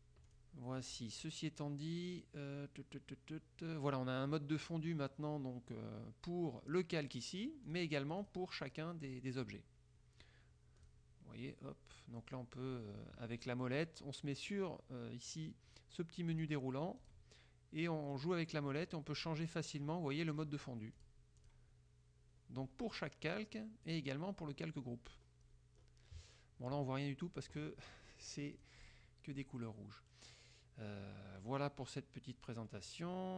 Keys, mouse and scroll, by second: 0.4 click, 7.8 click, 8.3 click, 8.8 click, 9.2 click, 9.6 click, 10.9 click, 12.2 scroll down 1, 12.8 scroll down 1, 13.0 scroll up 1, 13.3 scroll down 1, 16.4 click, 17.1 click, 17.8 scroll down 1, 18.9-19.5 scroll up 2, 20.4 scroll up 2, 21.0 click, 21.5 click, 22.4 scroll down 2, 24.0 click, 25.3 scroll down 2, 25.6-28.7 scroll up 3, 28.7 click, 29.5 click.